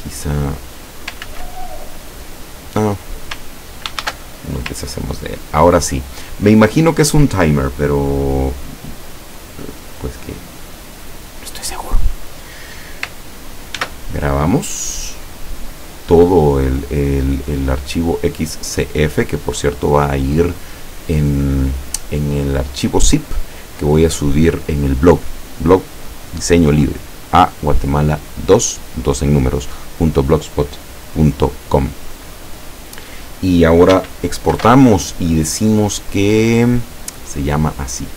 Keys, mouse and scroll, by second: 0.3 click, 1.3 ctrl+z, 4.1 ctrl+shift+a, 4.8-5.6 ctrl+scroll down 4, 6.3 ctrl+scroll up 3, 11.0 scroll up 2, 11.6 scroll down 2, 13.8 ctrl+s, 34.5 ctrl+shift+e, 37.1 click.